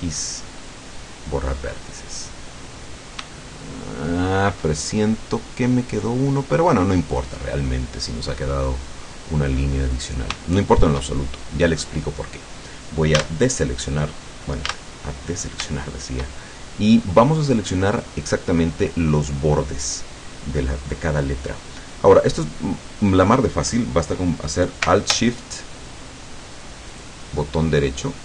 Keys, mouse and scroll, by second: 0.7 click, 1.9 scroll up 1, 2.8 scroll down 1, 3.4-7.2 shift+middle drag, 7.7-8.1 scroll up 2, 8.4-8.8 scroll down 2, 8.9-10.3 middle drag, 10.5 shift+middle click, 11.3 shift+middle click, 13.2 a, 14.7 a, 15.4 scroll up 2, 15.8-16.4 shift+middle drag, 16.4 shift+scroll up 2, 17.1 scroll down 2, 26.9 alt+shift+right click.